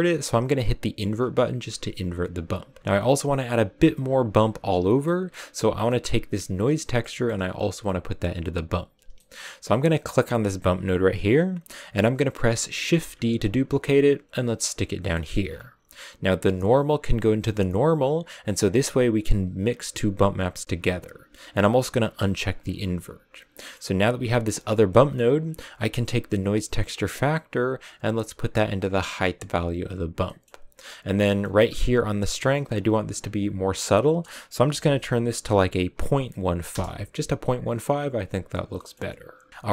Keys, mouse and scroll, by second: 1.7-2.8 drag, 2.8-6.6 middle drag, 6.6-10.0 drag, 10.0 right click, 12.9 shift+d, 18.0 click, 19.0 click, 19.8 click, 20.2 click, 20.6 click, 22.6 click, 23.3 scroll down 4, 23.7-25.9 middle drag, 25.9-29.3 drag, 30.3-36.6 middle drag, 38.2 click.